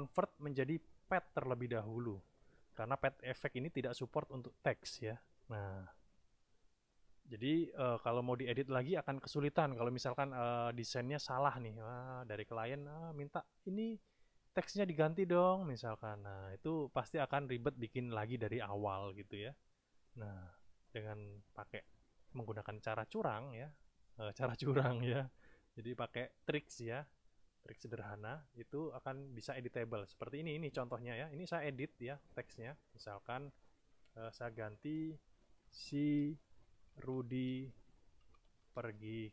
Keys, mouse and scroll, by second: 30.9 click, 32.5 click, 34.4 BackSpace, 35.8-39.3 typing.